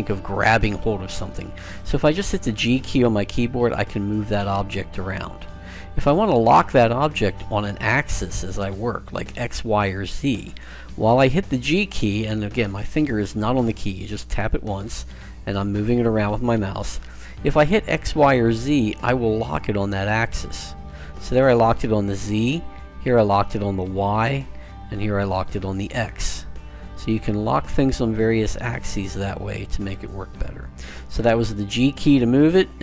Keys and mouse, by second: 2.3 g, 31.4 g.